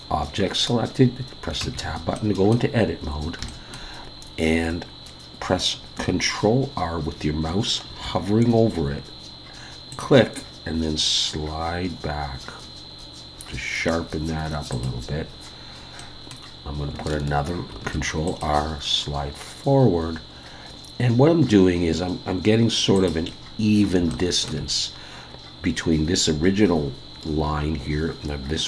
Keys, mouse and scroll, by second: 1.6 Tab, 2.1 middle click, 2.8-3.4 scroll up 2, 3.5 shift+middle click, 7.8 ctrl+r, 16.0 middle click, 17.7 ctrl+r, 23.4-24.0 scroll up 3, 24.1 shift+middle click, 24.8-26.5 scroll down 1.